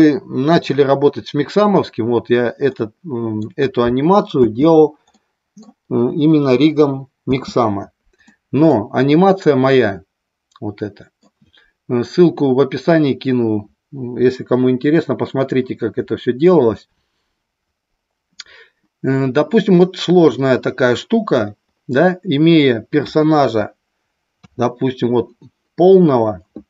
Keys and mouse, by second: 2.7-3.3 middle drag, 4.3 space, 5.0-5.7 middle drag, 7.3 space, 8.3-8.6 middle drag, 9.6-11.2 middle drag, 19.8-21.4 middle drag, 22.9 KP_1, 23.4 KP_2, 24.4 KP_3.